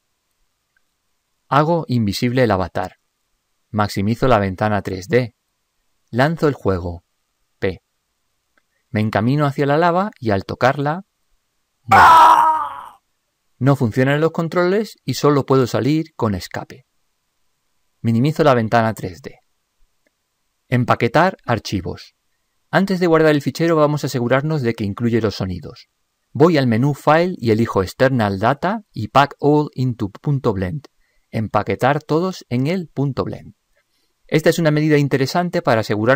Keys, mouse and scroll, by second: 3.4-4.7 drag, 18.8 ctrl+Up.